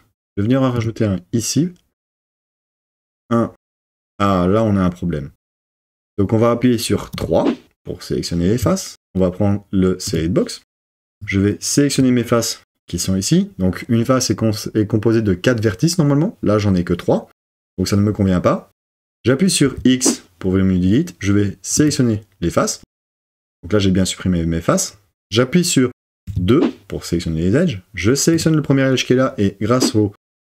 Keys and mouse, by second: 0.8 click, 7.1 3, 19.6 x, 26.3 2.